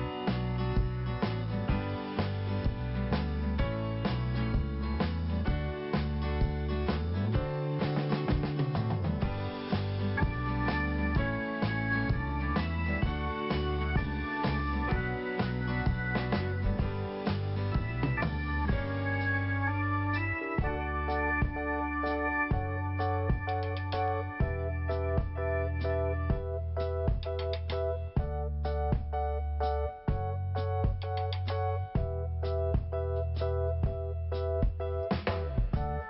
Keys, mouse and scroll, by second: 0.9 click, 1.9 click, 3.5 click, 5.0 click, 5.8 click, 5.9 click, 6.3 scroll down 1, 8.0 scroll up 2, 8.9 p, 9.3-10.1 scroll down 1, 10.3 click, 11.3 scroll down 1, 12.0-12.6 scroll up 1, 12.6 scroll down 1, 13.1 scroll up 1, 16.8 click, 17.7 scroll down 1, 19.3 click, 21.1-21.7 scroll down 1, 21.7 scroll up 1, 23.1 click, 28.7-29.3 scroll down 2, 30.1 click, 33.0 click, 33.0 5, 34.9 click, 35.7 scroll down 1.